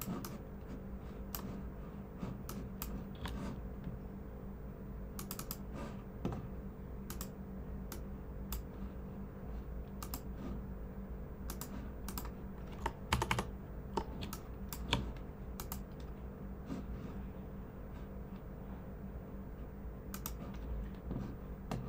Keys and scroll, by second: 13.1 super+-, 13.3 super+-, 14.2 space, 14.7 space, 14.8 space.